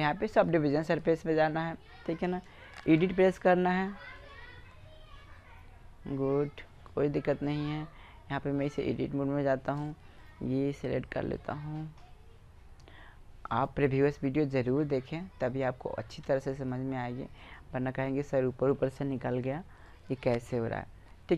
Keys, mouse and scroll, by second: 2.0-3.8 middle drag, 4.2-5.8 right drag, 5.8-7.0 middle drag, 8.2-9.0 drag, 8.2 typing, 10.0-11.4 middle drag, 13.5-19.1 right drag, 19.3 right click, 19.5 b, 19.7 right click, 20.2-21.2 drag.